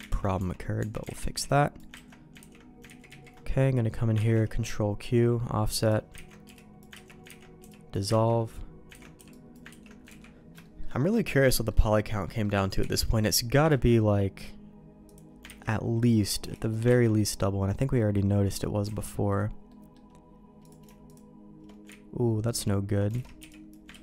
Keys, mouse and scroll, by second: 0.1 ctrl+x, 0.3 Tab, 0.7 Tab, 1.1 alt+a, 1.3 b, 2.0 ctrl+q, 2.4 ctrl+x, 2.8 ctrl+z, 3.1 ctrl+z, 4.3 ctrl+q, 6.2 ctrl+x, 6.4 b, 7.0 ctrl+q, 7.2 ctrl+x, 7.6 b, 8.2 ctrl+q, 9.0 ctrl+x, 9.1 b, 9.8 ctrl+q, 10.2 ctrl+x, 10.6 shift+middle click, 10.9 middle click, 11.5 shift+middle click, 12.2 middle click, 12.8 b, 13.6 ctrl+q, 15.0 click, 15.4 ctrl+x, 16.4 b, 17.0 ctrl+q, 17.9 middle click, 18.9 alt+a, 19.7 middle click, 20.6 click, 21.0 click, 22.3 ctrl+z, 22.9 ctrl+z, 23.1 alt+a, 23.4 b, 23.9 ctrl+q.